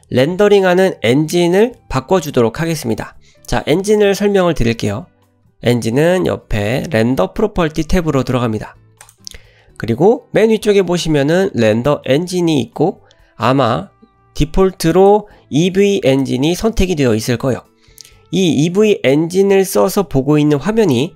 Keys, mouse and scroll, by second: 9.1 click, 14.9-16.2 drag.